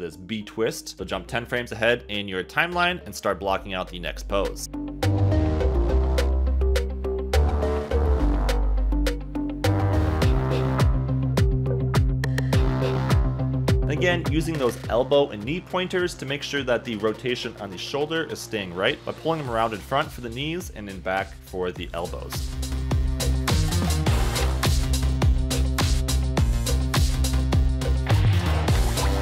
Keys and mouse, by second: 0.0-15.3 typing, 2.7 click, 3.8 middle click, 4.4 click, 6.2 Escape, 6.9 click, 10.9 click, 11.7 click, 13.2 Escape, 13.8 click, 14.4 click, 14.8 click, 16.7 click, 16.8-19.0 typing, 19.5 click, 21.0 middle click, 21.3 g, 22.1 space, 22.3 space, 24.1 Escape, 24.1-26.5 typing, 25.6 click.